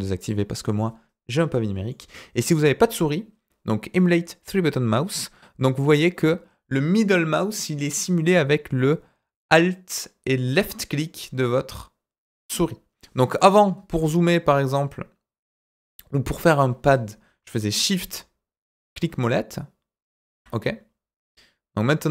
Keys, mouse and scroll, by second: 1.8-2.4 middle drag, 13.6-15.8 middle drag, 17.9-20.2 shift+middle drag.